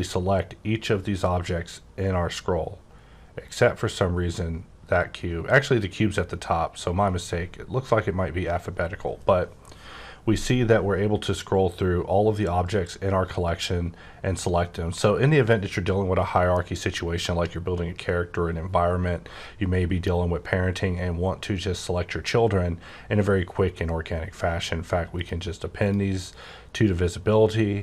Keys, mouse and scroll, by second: 0.8-1.4 scroll down 3, 1.4-2.9 scroll up 5, 2.9-5.3 scroll down 11, 5.3-5.9 scroll up 2, 5.9-6.9 scroll down 1, 6.9-7.3 scroll down 2, 7.3-9.0 scroll up 11, 9.0-9.4 scroll down 3, 9.4-10.0 scroll up 5, 10.0-10.6 scroll down 5, 10.6 scroll up 5, 11.1-12.0 scroll down 6, 12.0-12.4 scroll up 8, 12.5-12.8 scroll down 4, 12.8-13.4 scroll up 4, 13.4-13.7 scroll down 1, 13.7-14.1 scroll up 2, 14.1 scroll down 2, 14.7-15.4 scroll up 1, 15.4-17.5 scroll up 2, 19.3 scroll down 2, 19.8-20.3 scroll up 3, 20.4-20.8 scroll down 4, 20.8-21.3 scroll up 6, 21.6-21.9 scroll up 1, 21.9 scroll down 3, 22.2 scroll up 2, 22.5 scroll down 2, 22.7 scroll up 4, 23.5 scroll down 3, 23.7-25.0 scroll up 4, 25.1 click, 25.8 click.